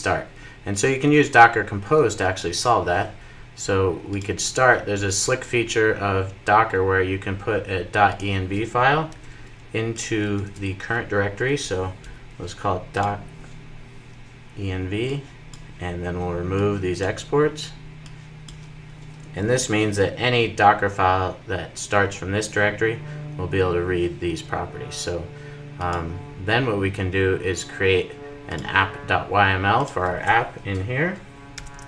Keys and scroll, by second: 9.0 super+c, 10.2 super+v, 19.4 super+s, 31.6 super+n.